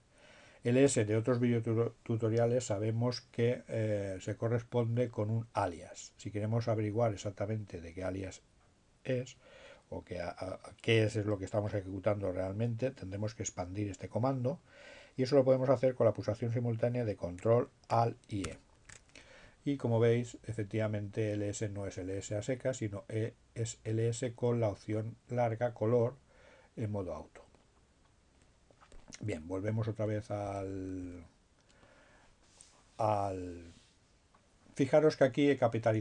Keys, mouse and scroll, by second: 0.5 space, 17.9 ctrl+alt+e, 26.7 Up, 30.3 Down, 34.8 Left.